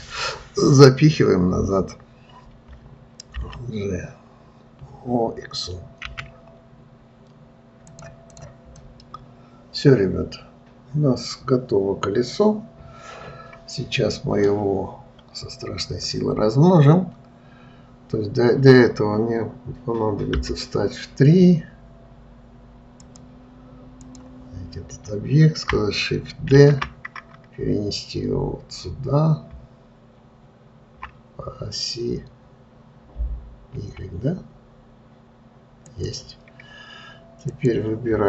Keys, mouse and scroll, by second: 8.7 click, 9.3-12.3 middle drag, 15.3-16.1 scroll down 1, 16.1-19.1 scroll up 1, 20.8 KP_3, 23.4-26.6 drag, 37.9 click.